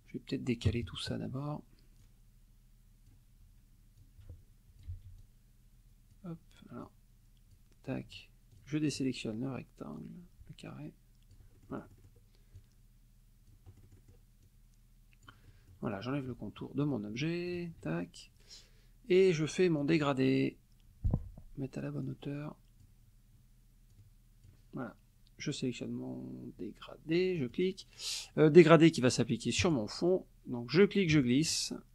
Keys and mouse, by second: 0.7 KP_Subtract, 2.0-3.3 drag, 4.0 ctrl+click, 4.9 ctrl+z, 5.2-6.3 ctrl+drag, 6.8-7.7 drag, 8.5 shift+click, 10.0-11.5 drag, 11.6 ctrl+middle click, 12.6 click, 13.7 middle click, 14.4 click, 15.5 middle click, 17.5 shift+click, 19.8 click, 21.1 F1, 22.1-23.0 drag, 23.9-24.7 drag, 27.4 click, 29.6 click, 30.7-31.9 drag.